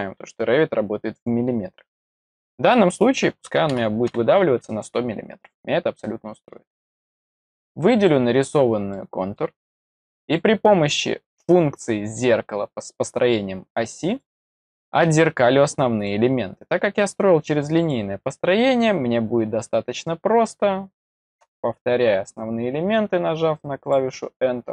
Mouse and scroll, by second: 5.9-6.4 middle drag, 7.3-8.0 drag, 8.8-9.3 middle drag, 14.0 click, 14.4 middle click, 15.9 click, 17.7 click, 23.7 click.